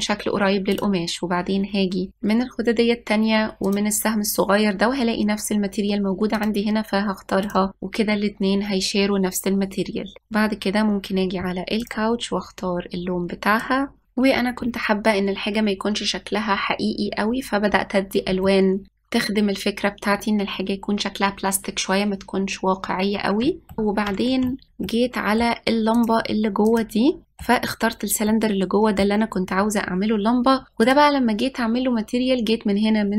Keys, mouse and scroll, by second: 1.6 click, 4.4-7.5 drag, 7.9 click, 10.8 click, 12.6 click, 14.9 ctrl+s, 15.0 middle drag, 15.7 click, 16.5 click, 17.0 ctrl+s, 17.0 middle click, 17.2 click, 17.6 click, 19.9 click, 22.2 click, 23.8 scroll up 2, 24.4-26.8 shift+middle drag, 26.8 drag, 27.8-30.4 middle drag, 30.4 scroll down 1, 31.7-33.1 drag.